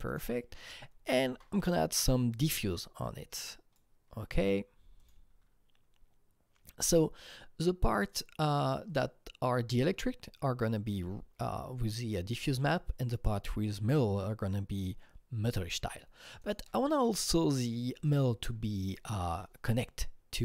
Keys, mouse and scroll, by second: 0.1 click, 0.5-1.3 scroll down 6, 1.3 alt+Tab, 2.3-7.6 drag, 3.4 click, 8.1-10.7 drag, 16.4 click, 18.1 click, 19.1 alt+Tab.